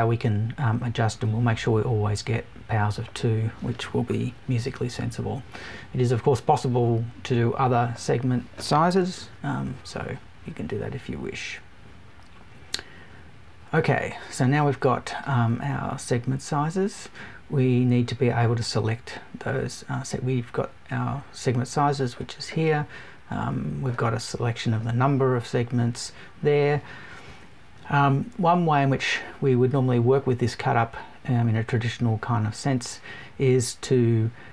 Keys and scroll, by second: 4.7 Up, 5.5 Right, 9.2 Right.